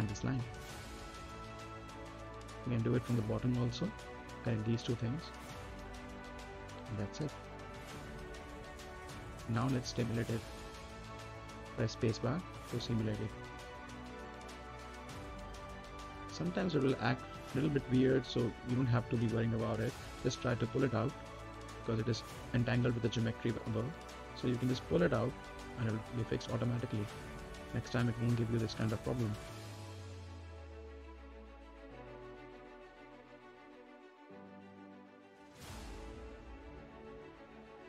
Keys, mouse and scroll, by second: 1.6 scroll up 1, 2.9 right click, 3.9 middle click, 4.2-5.4 scroll down 1, 5.4 click, 7.9-9.4 right drag, 9.4 click, 10.7 right click, 11.7 scroll down 1, 11.9 middle click, 12.0 scroll up 1, 12.3 right click, 12.7 middle click, 13.6-14.9 drag, 14.9 space, 15.9 right click, 16.5 middle click, 16.8 space, 17.6 right click, 18.0 click, 18.3 space, 18.9-21.1 drag, 21.1 right click, 22.3-23.6 drag, 23.6 right click, 24.5-26.5 drag, 26.5 right click, 27.1-30.0 drag, 30.0 space, 31.0 ctrl+z, 34.3 right click, 34.8 click, 35.2 right click, 36.5 click, 37.7 space.